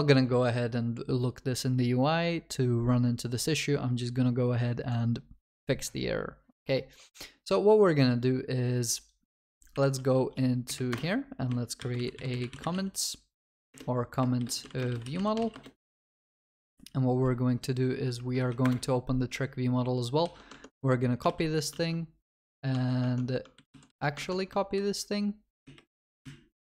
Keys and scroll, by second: 9.8 alt+Insert, 18.2 alt+1, 18.4 Down, 20.3 ctrl+c, 20.6 ctrl+Tab, 21.7 ctrl+v, 21.8 ctrl+s, 23.1 ctrl+Tab, 23.6 ctrl+c, 24.2 ctrl+Tab, 25.0 ctrl+v, 25.1 ctrl+a.